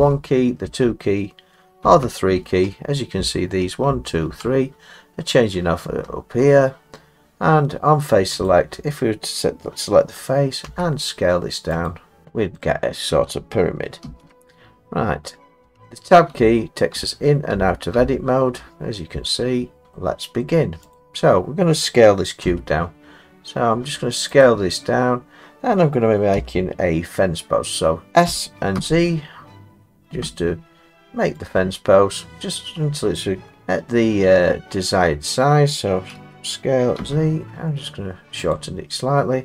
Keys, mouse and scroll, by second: 0.0-0.7 typing, 1.8 3, 3.2-4.4 typing, 5.5 typing, 8.5 click, 10.7 s, 11.9 click, 12.5 click, 12.6 middle click, 14.1 ctrl+z, 15.6 Tab, 16.4 Tab, 17.0 Tab, 17.6 Tab, 18.0 Tab, 18.6 Tab, 19.8 middle click, 20.4 middle click, 21.0 click, 22.5 s, 24.2 scroll, 24.4 click, 26.4 s, 28.3 s, 28.8 z, 31.5 click, 32.2-33.5 scroll, 36.2 s, 38.5 click.